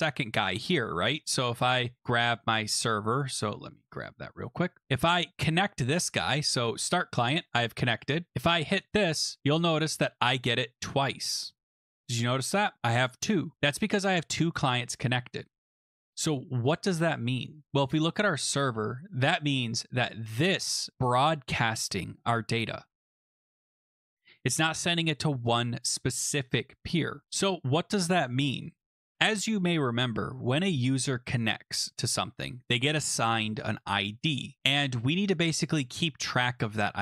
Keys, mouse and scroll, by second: 0.6 click, 2.0 click, 2.4 click, 3.5 click, 5.4 click, 6.9 click, 8.0 click, 9.0 click, 9.8 click, 10.3 click, 13.7 click, 15.8 click, 17.6 click, 18.0-18.8 scroll down 7, 20.6 scroll, 20.9 click, 24.5 click, 29.1 click, 31.3-32.2 scroll down 5, 32.2 scroll down 1, 32.4 scroll, 34.2-34.9 scroll, 35.3 click, 36.0 click.